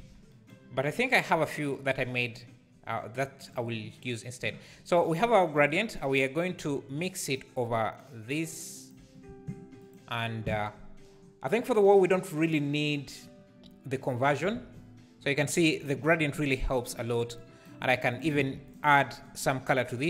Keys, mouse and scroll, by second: 0.0 alt+a, 3.5 click, 7.3-8.9 drag, 9.9 ctrl+shift+click, 14.6 alt+a, 18.1 click, 18.4 shift+d, 19.0 scroll up 1.